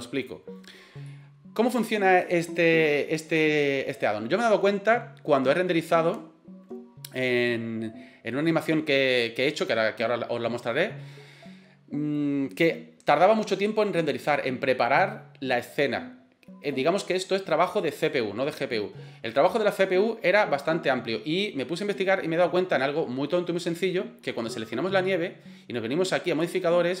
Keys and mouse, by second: 1.1-1.7 middle drag, 24.5 right click, 26.4 click.